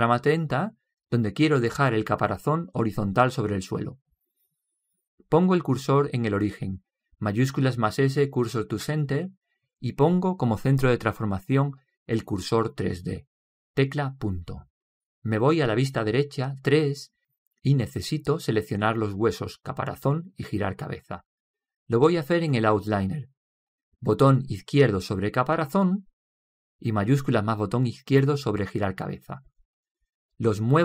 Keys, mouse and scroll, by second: 8.0 shift+s, 14.8 ., 17.2 KP_3, 26.0-30.8 drag.